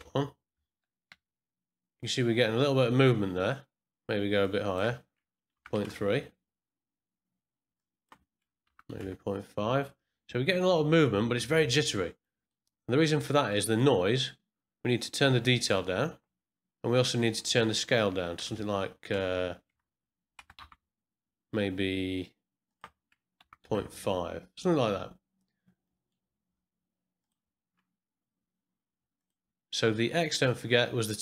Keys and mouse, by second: 1.1 space, 4.4-7.1 drag, 7.7-10.1 drag, 12.2 middle click, 13.5 middle click, 15.0 click, 17.2-21.6 drag, 19.7 KP_Enter, 20.5 KP_Decimal, 22.6-25.3 drag, 25.8 middle click, 27.2-29.2 drag, 30.5-31.2 drag.